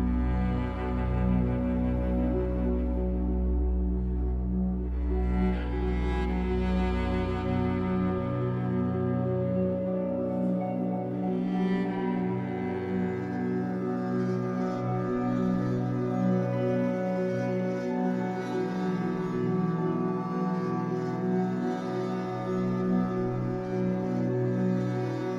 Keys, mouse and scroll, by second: 2.1 click, 2.6 e, 3.7 click, 4.3 e, 5.5 click, 7.7-11.1 shift+middle drag, 8.1 scroll up 1, 9.0 scroll down 1, 11.1-12.1 drag, 12.1 b, 14.6 click, 15.1 e, 16.1 click, 16.6 e, 17.9 click, 18.3 e, 19.2 click, 19.6 e, 20.9 click, 21.4 e, 23.2 click, 23.7 e, 25.3 click.